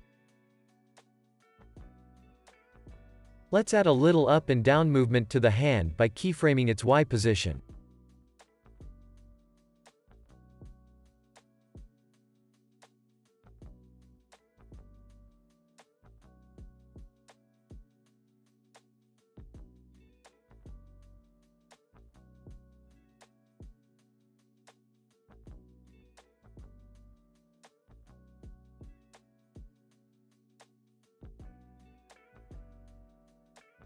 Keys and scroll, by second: 10.4 shift+r, 10.8 x, 14.7 x.